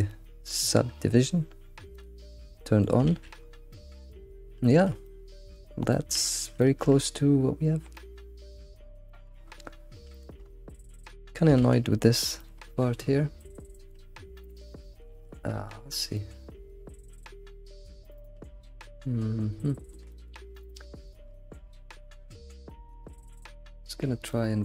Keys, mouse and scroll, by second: 2.2 click, 2.6-3.1 middle drag, 3.1 alt+shift+z, 3.4-3.8 scroll up 3, 3.8-4.2 middle drag, 4.2-4.7 scroll down 6, 4.7-6.3 shift+middle drag, 6.3-6.7 scroll up 3, 6.7-7.0 shift+middle drag, 7.0-8.0 scroll up 2, 8.0-9.5 middle drag, 9.5 scroll up 3, 10.2 alt+middle click, 10.8-11.6 scroll up 4, 11.6 alt+shift+z, 12.4 alt+middle click, 12.8 middle drag, 13.1 scroll up 2, 13.4-14.6 middle drag, 14.6 alt+shift+z, 15.1 alt+shift+z, 15.6 Tab, 16.1-19.2 middle drag, 20.1-20.5 shift+middle drag, 20.5 click, 21.0 ctrl+click, 21.6 g, 23.3 shift+click, 23.7-24.3 scroll down 1, 24.3-24.6 middle drag.